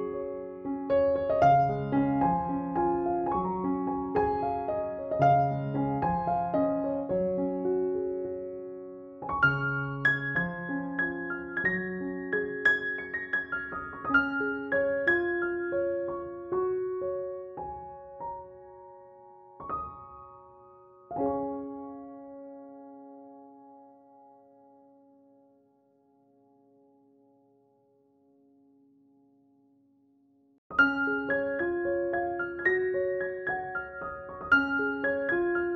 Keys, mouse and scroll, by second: 9.8-11.2 scroll down 1, 11.6 click, 11.9 space, 12.2 b, 12.5-13.3 click, 13.3 x, 13.4-15.4 drag, 21.8 ctrl+click, 22.1 ctrl+e, 22.8 ctrl+-, 24.4 ctrl+=, 26.7 space, 31.9 a, 33.4 s, 34.5-35.7 drag.